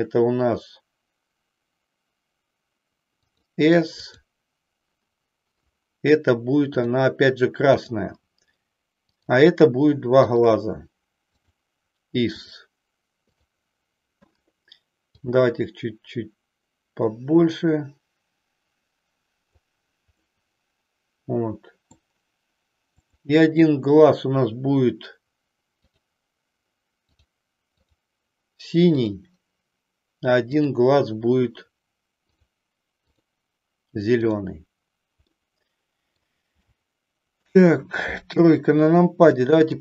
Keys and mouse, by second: 4.0 click, 9.2 click, 10.3 shift+click, 11.5-12.6 drag, 13.5 click, 15.1-19.8 drag, 20.3-21.9 middle drag, 22.9 click, 27.9 click, 29.0 click, 35.4 middle click, 36.8 shift+middle click, 38.3 KP_3, 39.3 shift+middle click.